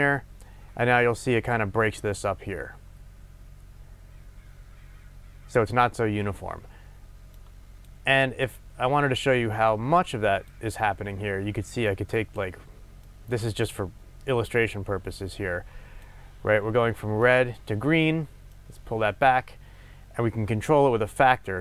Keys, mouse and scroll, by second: 17.6 click, 18.5-21.6 drag, 21.4-21.6 scroll down 2.